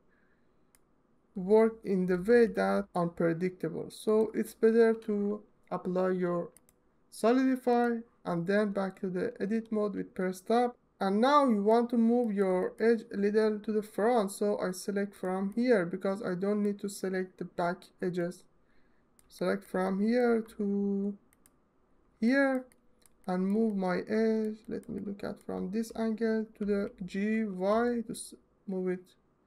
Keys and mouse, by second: 0.2 ctrl+alt+click, 1.8 g, 2.2 y, 4.3 Tab, 6.2-7.5 right drag, 11.4-12.0 alt+shift+middle drag, 12.1-12.4 ctrl+alt+shift+middle drag, 12.5-15.0 alt+middle drag, 15.3-16.4 alt+middle drag, 17.8 alt+middle click, 18.0 alt+middle click, 19.9-21.6 ctrl+alt+middle drag, 22.4 alt+click, 23.4 alt+click, 26.2 g, 27.1 y.